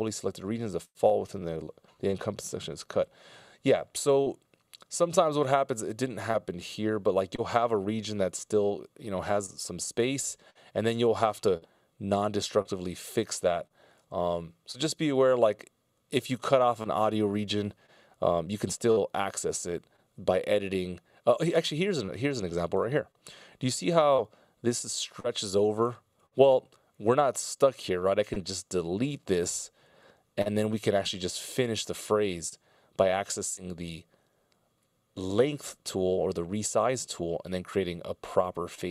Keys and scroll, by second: 29.7 BackSpace.